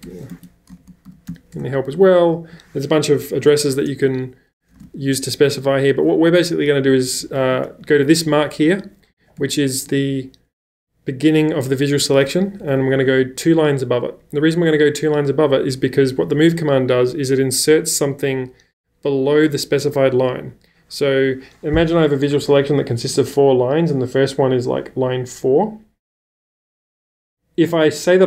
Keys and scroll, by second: 0.0-1.8 typing, 0.0 Escape, 4.7 space, 4.9 q, 6.0-10.4 typing, 12.5 ⟲, 12.9 l.